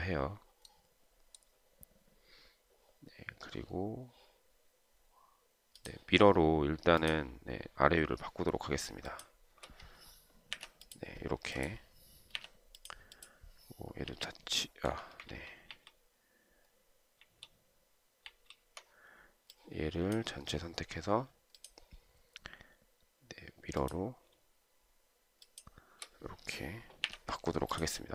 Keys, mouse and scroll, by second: 9.4 shift+click, 10.9 Delete, 12.7 Delete, 14.3 Delete, 15.7 ctrl+z, 17.5 ctrl+z, 25.7 shift+click, 27.3 Delete.